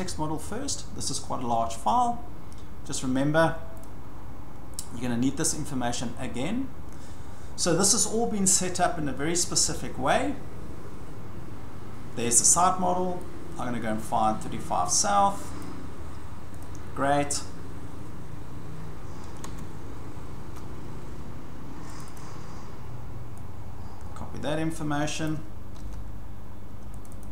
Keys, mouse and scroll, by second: 3.0 click, 3.8 click, 12.3 click, 15.6 click, 16.6 click, 19.4 alt+Tab, 22.0 click, 22.2 click, 25.2 click, 25.8 ctrl+c, 27.0 click, 27.2 click.